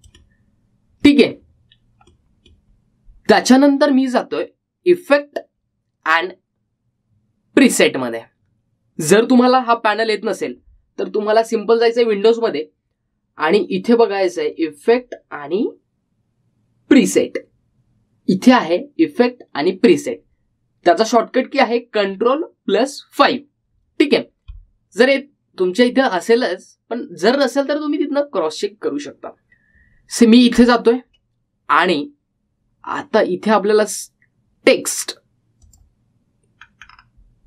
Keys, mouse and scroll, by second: 1.0-6.0 middle drag, 13.1 click, 17.7 click, 27.0 click, 31.7 click, 34.6-36.7 scroll down 1, 36.7 click.